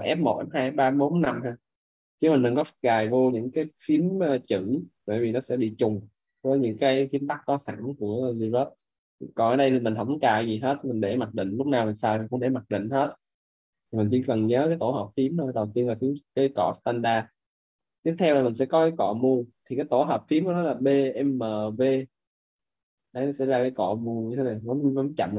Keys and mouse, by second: 16.2 right click, 20.7-22.0 typing.